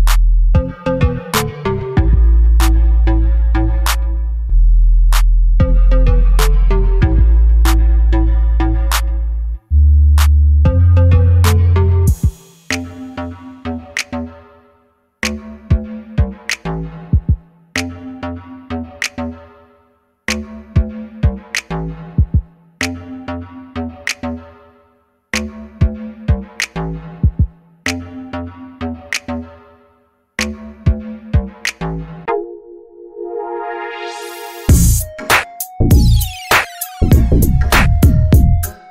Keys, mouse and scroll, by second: 6.2 click, 7.6-10.9 drag, 13.4 click, 14.7 click, 15.3 click, 15.8 click, 19.5 KP_0, 26.8 click, 28.4 click, 36.3-37.5 middle drag, 37.5 click, 38.2 middle click, 38.4 click.